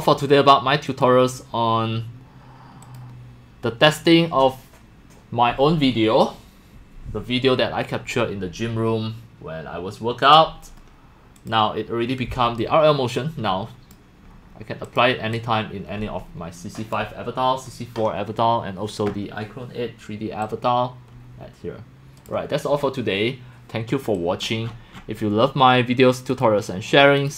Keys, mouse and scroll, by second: 0.9 click, 1.6 click, 2.8 click, 11.4 click, 12.6-13.9 drag, 14.1 middle click, 14.4 middle click, 14.9 click, 15.3-16.9 drag, 20.5-22.3 drag, 22.5 click, 24.1 click, 24.6 middle click, 24.9 click, 26.3 click, 27.2 click.